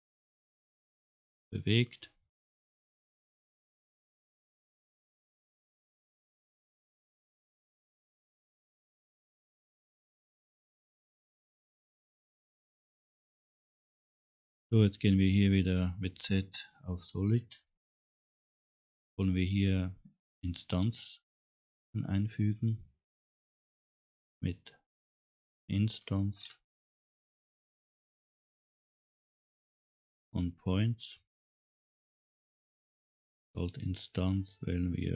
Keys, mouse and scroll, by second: 0.7 scroll down 1, 1.1 scroll up 1, 8.1 click, 8.9 click, 9.5 scroll down 1.